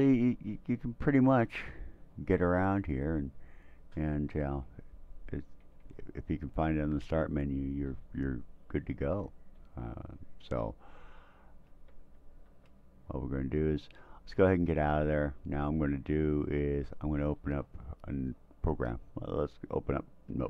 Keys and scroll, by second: 0.3 Down, 0.6 Down, 2.4 Up, 5.0 shift+Right, 5.2 shift+Right, 5.4 shift+Right, 11.7 Tab, 12.5 Tab, 14.4 Escape.